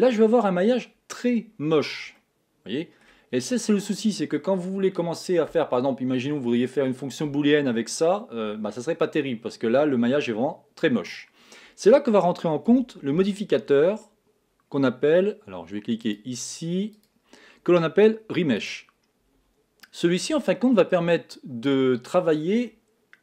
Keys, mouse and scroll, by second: 0.0 Tab, 0.5-1.9 middle drag, 1.9-2.5 scroll up 4, 2.5-3.7 middle drag, 3.7 scroll down 4, 4.1-7.1 middle drag, 13.1 Tab, 16.4 click, 17.3 click, 20.8-22.5 shift+middle drag, 22.5 scroll down 2, 22.6-23.2 scroll up 1.